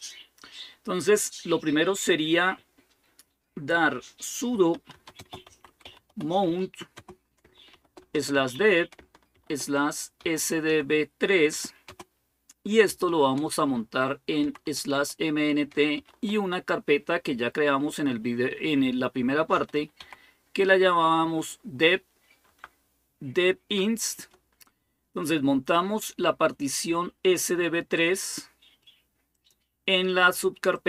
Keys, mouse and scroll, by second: 4.3-11.7 typing, 12.9 typing, 14.2-14.7 typing, 15.8 typing, 19.1-21.4 typing, 22.3 Tab, 29.1 click, 29.5 click, 30.5-30.8 drag.